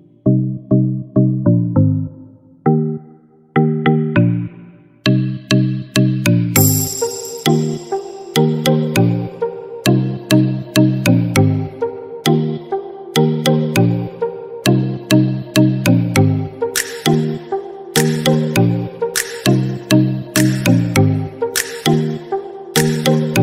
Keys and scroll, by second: 2.6 ctrl+d, 5.9 ctrl+=.